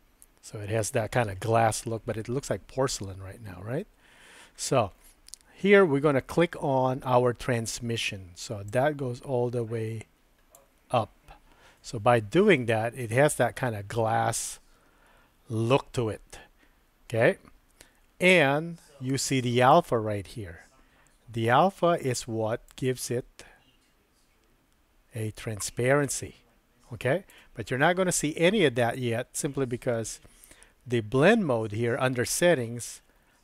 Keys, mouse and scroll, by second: 8.7-10.6 drag, 12.6-18.4 middle drag, 22.8-27.3 drag, 28.1 click.